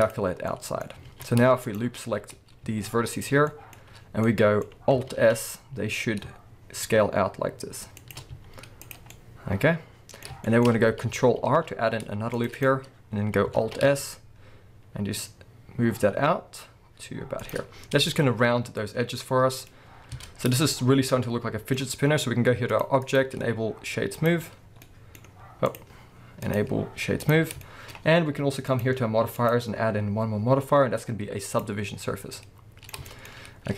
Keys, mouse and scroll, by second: 0.8 scroll up 1, 1.1 alt+a, 1.6 alt+shift+click, 2.0-2.6 scroll down 1, 2.6 z, 3.5-8.1 middle drag, 3.7-4.2 scroll up 1, 5.1 alt+s, 8.1 shift+click, 8.3 z, 9.1-12.6 middle drag, 10.6-11.4 scroll up 2, 11.4 ctrl+r, 12.6 click, 13.5 alt+s, 17.5 shift+click, 17.6-18.2 scroll down 2, 18.2-22.7 middle drag, 20.0 scroll down 2, 20.2 Tab, 22.7 click, 23.0-24.8 drag, 24.6 scroll down 1, 24.8-25.7 middle drag, 25.3-25.7 scroll up 2, 25.7 click, 26.4-27.6 drag, 27.6-28.7 shift+middle drag, 28.7 click, 29.4-32.3 drag, 32.3-33.7 middle drag, 33.3-33.7 scroll up 2.